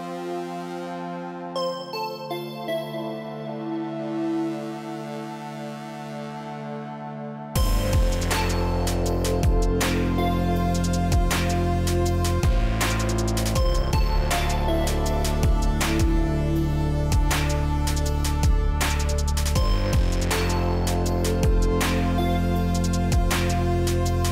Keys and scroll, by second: 10.4 Up, 12.4 Right, 23.1 Up.